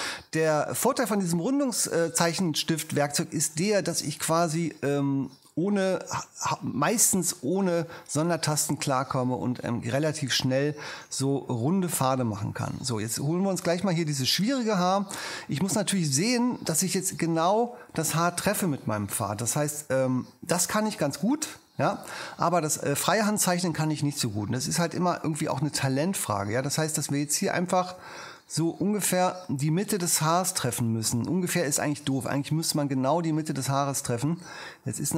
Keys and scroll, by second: 11.3 super+space, 15.9 super+space.